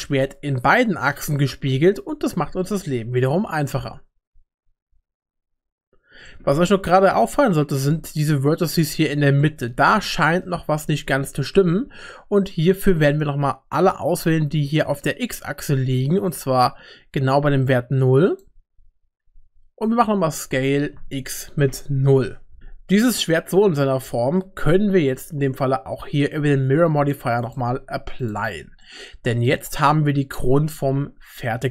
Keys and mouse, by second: 6.3 middle click, 7.3 shift+middle click, 8.6 Tab, 9.4 middle click, 10.2 middle click, 11.5-15.3 drag, 16.3-18.4 drag, 20.5 s, 22.6 Tab, 22.6 middle click, 22.8 click, 27.5 click, 28.8 middle click, 30.8 Tab.